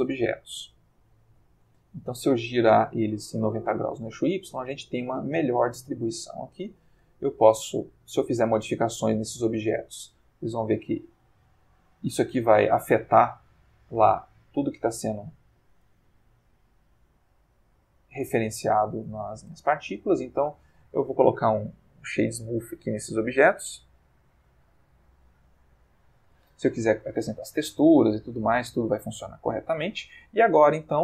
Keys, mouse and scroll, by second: 0.0 Escape, 0.8 ctrl+click, 1.6 ctrl+shift+click, 2.5 ctrl+click, 4.0-5.1 ctrl+drag, 5.5-6.9 shift+middle drag, 7.6 click, 8.3 Tab, 8.9 click, 9.5 g, 11.2 Escape, 11.2 F1, 11.6 click, 12.1 g, 14.7 Escape, 15.3 Tab, 15.6 click, 16.2 Tab, 16.6 click, 16.8 g, 18.6 Escape, 19.2 ctrl+middle click, 19.6 ctrl+Tab, 20.2 right click, 21.1 click, 22.7 click, 23.1 right click, 23.8 click, 24.7 click, 25.1 right click, 25.6 click, 27.8-29.3 ctrl+middle drag, 29.4-30.1 ctrl+shift+middle drag.